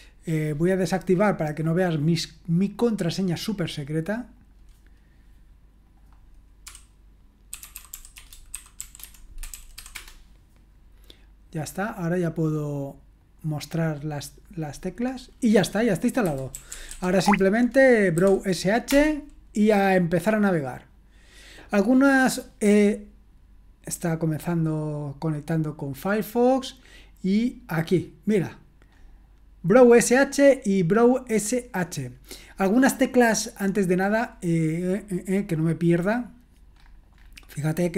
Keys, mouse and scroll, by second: 2.7 click, 3.5 click, 4.4 click, 14.5 click, 16.0-18.9 typing, 28.1 click, 29.1-30.2 scroll up 1, 31.0 click, 35.3-36.8 scroll down 2, 36.8-37.9 scroll up 2.